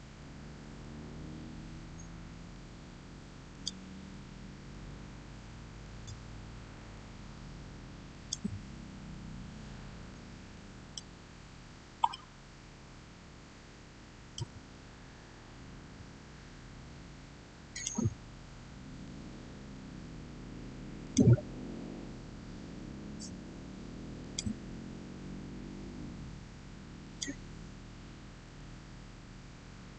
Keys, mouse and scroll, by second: 0.0 6, 0.5 Return, 3.4 click, 4.6 Return, 5.7-8.0 drag, 8.0 click, 10.4 shift+middle click, 10.6 shift+scroll down 1, 12.0-15.1 shift+middle drag, 15.1 scroll up 1, 17.6 click, 20.9 click, 24.1 click, 26.9 click, 28.4 Return.